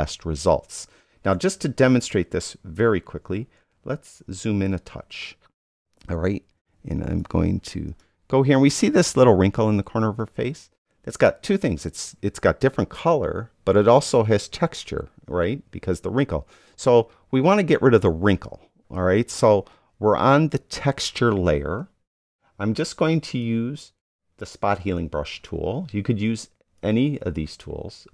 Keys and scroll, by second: 3.5 super+-, 6.7 space.